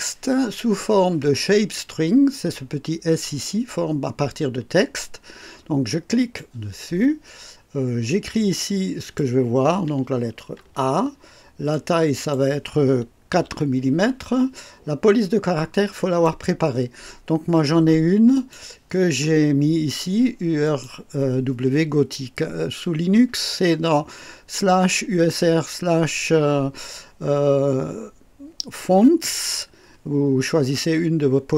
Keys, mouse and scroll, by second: 6.2 click, 8.5 click, 10.6 shift+a, 11.7 click, 13.5 KP_4, 16.0 click, 18.3 click, 19.1 scroll down 1, 20.6 click.